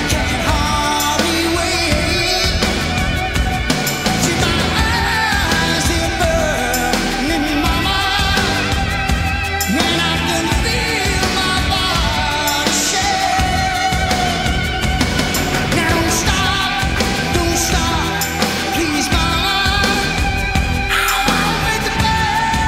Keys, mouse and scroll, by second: 0.7 z, 1.2-4.2 drag, 4.2 middle click, 4.2 right click, 4.4 click, 4.7 click, 8.7 click, 11.0 g, 12.4-22.6 right drag, 16.1 g.